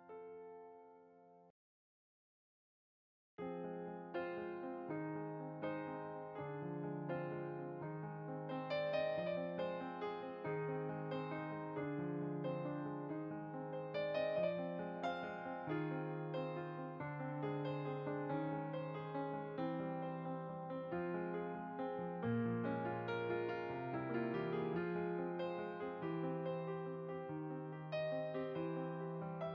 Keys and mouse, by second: 6.6 middle click, 8.3 click, 10.0 click, 10.8 middle click, 11.5 click, 12.1 middle click, 13.0 click, 13.7 middle click, 15.5 click, 16.2 middle click, 17.9 click, 18.6 middle click, 19.3 click, 20.6 middle click, 21.8 click, 23.9 middle click, 26.5 click.